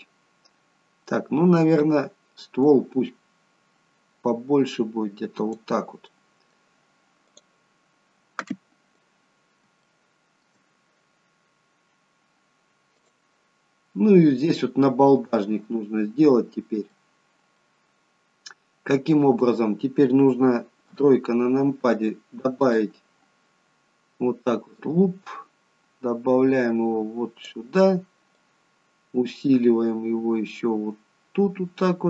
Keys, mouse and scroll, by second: 1.6-2.6 scroll down 3, 2.6 click, 6.3 middle click, 7.4 click, 7.9-8.5 scroll up 3, 8.5 middle click, 8.5-9.4 scroll up 1, 12.6 scroll up 1, 13.0 click, 13.5-14.2 scroll down 1, 15.3 middle click, 17.2-17.6 scroll up 2, 17.6 middle click, 20.9 KP_3, 22.6 click, 24.8 click, 28.3 click.